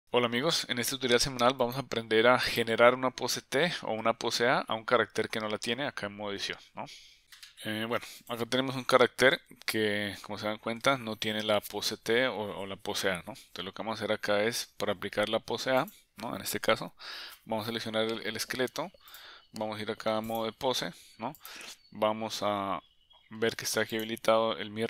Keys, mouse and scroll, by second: 1.7 click, 2.5 click, 4.1 Tab, 8.3 click, 9.5 Tab, 11.6 Tab, 15.8 click, 19.1-20.4 drag, 24.6 click.